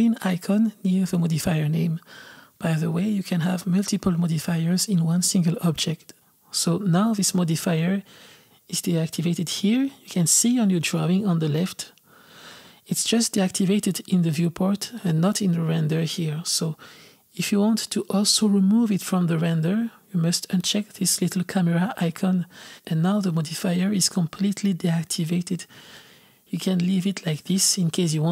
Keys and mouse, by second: 2.4 click, 14.9-18.0 drag, 23.5 click.